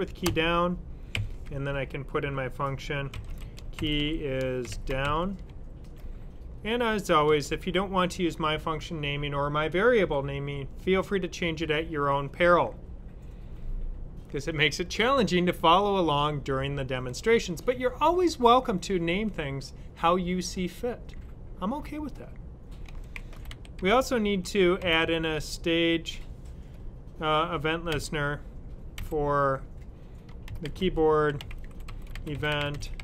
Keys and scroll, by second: 2.7-6.6 typing, 22.5-25.4 typing, 27.8 typing, 28.8 typing, 30.1-33.0 typing.